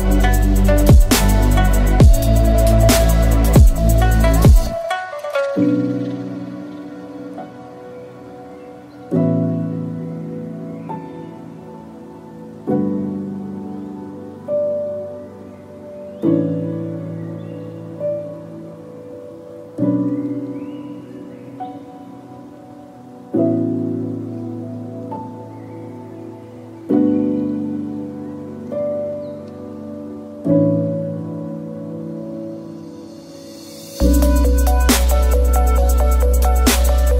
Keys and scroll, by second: 0.7 Tab, 3.7 F2, 5.9 0, 7.0 9, 7.1 0, 7.2 Return, 7.7 2, 8.3 Return, 12.4 Tab, 14.9 1, 15.0 Return, 15.5 2, 15.6 Return, 15.6 0, 17.2 ctrl+z, 20.4 F2, 23.2 typing, 24.6-25.3 typing, 30.2 Tab, 36.0 6, 36.1 5.